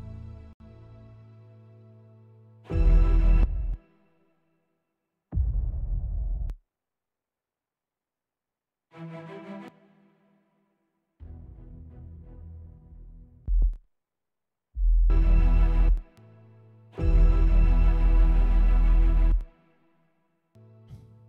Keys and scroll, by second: 3.6-4.1 typing, 6.6 space, 7.7 typing, 9.8-10.3 typing, 13.6-16.2 typing, 18.2 super+], 18.4 super+], 19.5 space, 20.7 space.